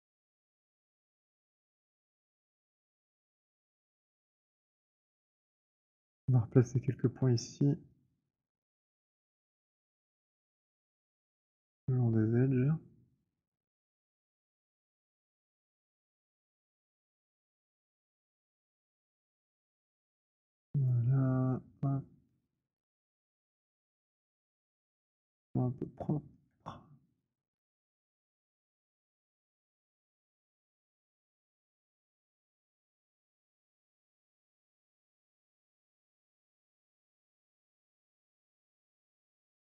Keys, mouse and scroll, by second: 0.9 middle click, 2.9 scroll, 3.7 middle click, 3.8 right click, 4.4 click, 5.1 middle click, 6.8 right click, 8.0 click, 9.0 b, 16.9 right click, 19.9 click, 20.8 click, 23.8 click, 26.4 alt+middle click, 27.6 click, 31.1 middle click, 31.7 alt+middle click, 32.4 alt+click, 33.1 middle click, 34.1 alt+middle click, 34.1 click, 37.2 middle click, 38.0 alt+middle click, 39.6 middle click.